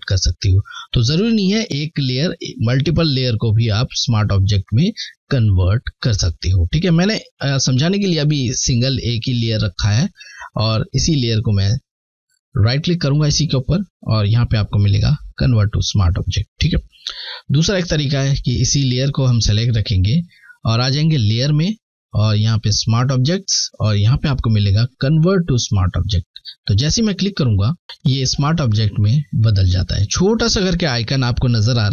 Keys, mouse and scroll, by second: 12.0 right click, 12.3 typing, 13.7-14.3 typing, 16.5 click, 16.5 typing, 19.1 typing, 20.3 click, 26.5 click.